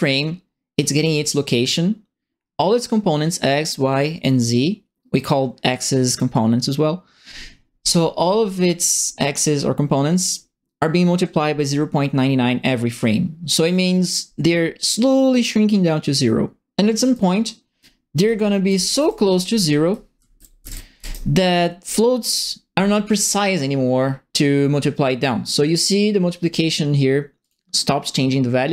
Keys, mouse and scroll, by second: 17.2-21.3 right drag, 17.5-21.4 typing, 27.4 click.